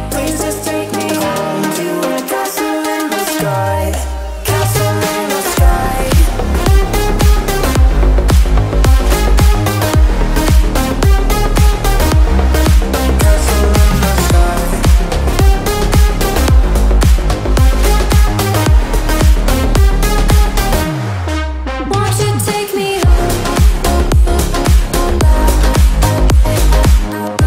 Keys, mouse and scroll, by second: 0.0-1.5 typing, 1.8 click, 6.2 ctrl+z, 6.5 click, 7.3 shift+middle click, 7.8 click, 9.9-11.5 shift+middle drag, 11.5 click, 13.4 shift+middle click, 14.0 click, 16.9 middle click, 17.4 click, 18.4 space, 18.5 middle click, 19.6 scroll down 1, 19.7 click, 19.9 space, 20.3 middle click, 20.7 scroll down 1, 21.0 shift+middle click, 21.4 scroll up 1, 22.2 click, 22.7-23.2 scroll up 1, 23.2 scroll down 1, 23.5-24.0 scroll up 1, 24.8 click, 25.0 scroll down 1, 26.6 scroll up 1, 26.8 shift+click.